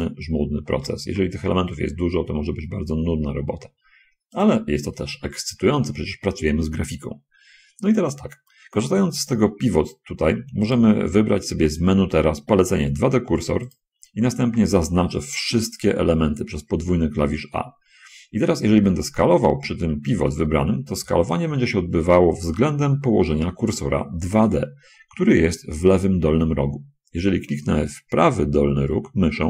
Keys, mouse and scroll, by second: 0.3 click, 0.7 l, 1.4 g, 4.7 click, 11.1 click, 14.1 click, 14.8 a, 15.3 a, 21.3 s, 24.7 Escape.